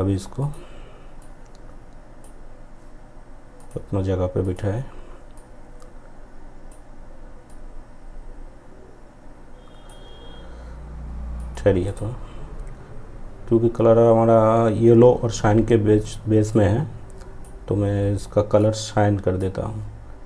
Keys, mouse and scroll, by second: 10.9 right click, 15.5-20.2 drag.